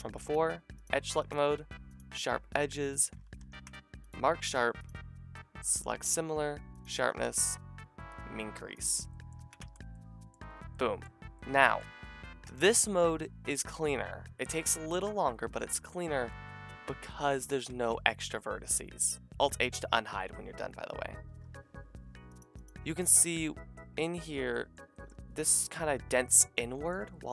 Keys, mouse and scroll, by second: 0.0 click, 0.3-0.8 middle drag, 0.8-3.1 drag, 3.2 ctrl+e, 9.4 a, 9.6 Tab, 10.6-11.4 middle drag, 12.5 shift+drag, 12.9 middle drag, 13.1-17.7 drag, 17.7 Tab, 18.5 alt+h, 21.3 a, 22.4 middle click, 22.9 shift+middle click, 24.1 click, 24.8 shift+middle click.